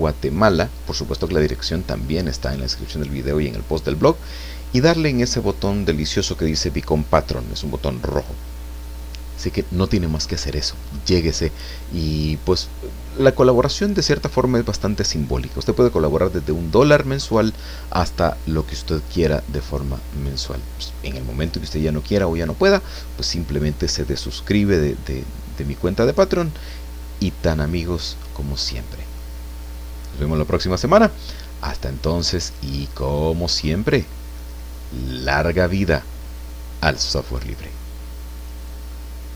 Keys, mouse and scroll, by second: 31.4 scroll down 2, 31.7 click, 33.2 scroll up 1, 34.1 scroll down 2, 38.5 click.